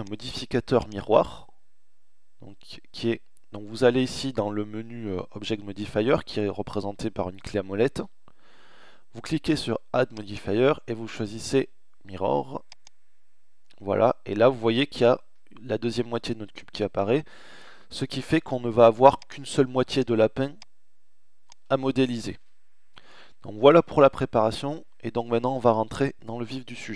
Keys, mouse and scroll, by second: 1.6-9.1 middle drag, 11.8-13.0 middle drag, 18.1 middle click, 18.8 click, 21.3 ctrl+z, 21.5-24.6 middle drag.